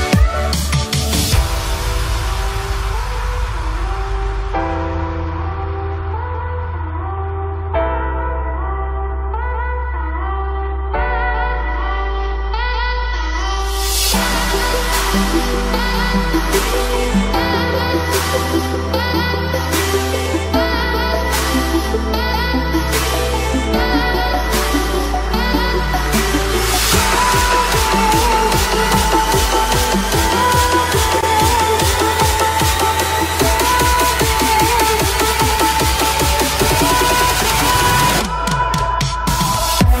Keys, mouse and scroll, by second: 0.0-0.4 typing, 1.9 click, 9.9-15.6 ctrl+drag, 15.6 ctrl+z, 17.5 ctrl+z, 19.8-21.6 drag, 28.3-29.3 typing, 29.5 click, 31.3 typing, 31.8 right click, 33.7 click, 33.9-34.7 typing, 35.5 click, 39.2-40.0 typing.